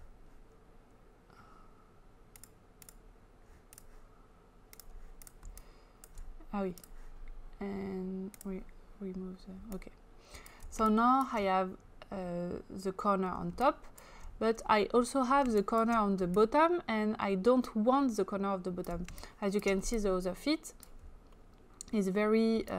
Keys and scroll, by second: 10.8 space, 14.7 space, 19.1 space.